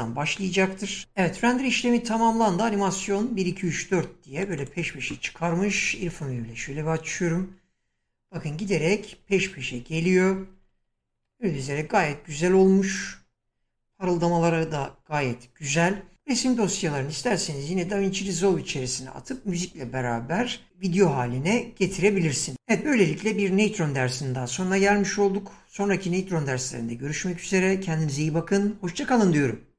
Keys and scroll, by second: 5.7 Right.